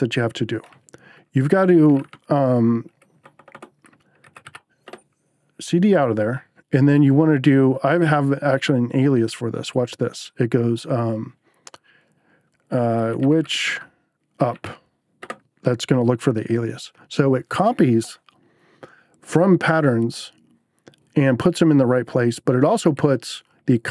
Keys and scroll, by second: 1.7 c, 2.0 space, 3.2-4.9 typing, 12.8-15.0 typing, 15.2 Return.